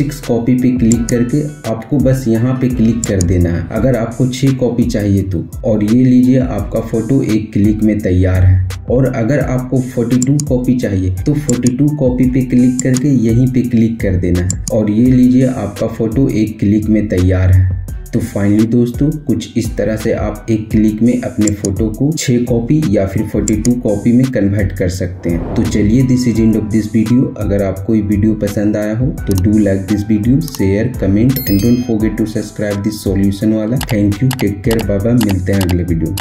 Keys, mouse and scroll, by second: 8.8 typing, 9.9 click, 16.8 typing, 21.1 click, 21.1 typing, 21.2 click.